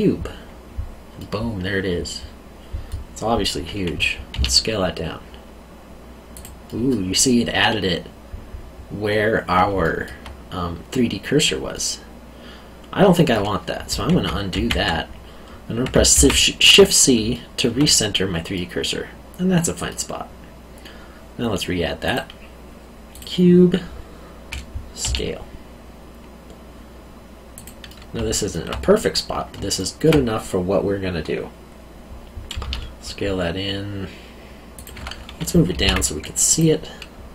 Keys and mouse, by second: 1.2 middle click, 4.3 s, 6.3 click, 6.6 middle click, 9.8 alt+middle click, 14.1 ctrl+z, 16.1 shift+c, 17.3 alt+middle click, 22.0 click, 25.0 s, 27.5 click, 27.9 middle click, 29.7 alt+middle click, 32.6 s, 34.7 click, 35.7 g, 35.8 z, 36.5 click.